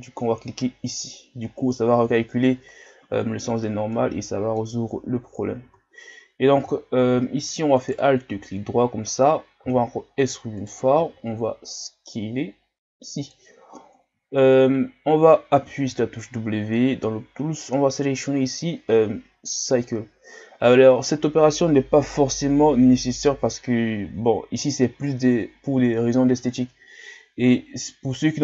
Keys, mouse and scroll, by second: 1.5 scroll up 3, 2.2 shift+scroll down 2, 3.9-5.7 middle drag, 5.7 Tab, 6.6 Tab, 7.8 alt+right click, 9.7 e, 11.0 s, 14.3 shift+scroll up 2, 15.8 w, 27.4 Tab, 28.2-28.4 middle drag.